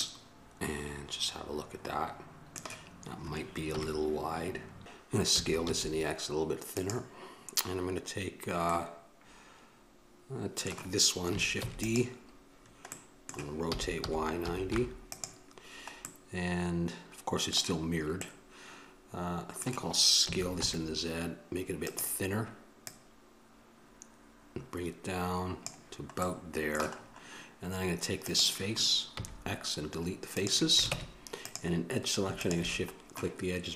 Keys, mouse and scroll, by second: 0.0-3.7 middle drag, 3.7 KP_1, 8.9-11.8 middle drag, 11.8 shift+d, 13.1 click, 13.9 r, 27.3-28.4 middle drag, 28.4-30.7 right drag, 31.1 ctrl+Tab, 32.6-33.7 drag.